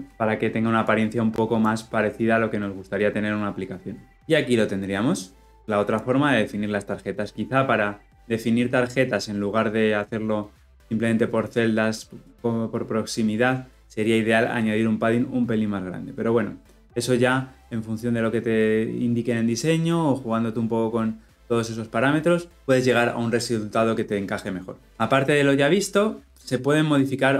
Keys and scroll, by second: 0.1 shift+F10.